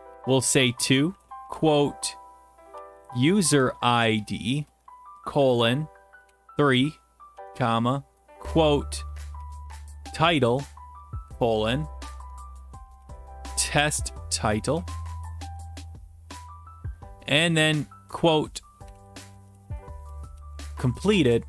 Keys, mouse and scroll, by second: 0.0-5.1 typing, 4.8 Right, 6.2 3, 7.4 ,, 7.5 Return, 8.1 ", 9.4-11.7 typing, 12.8-16.3 typing, 17.5 typing, 18.6-21.4 typing, 21.2 Right.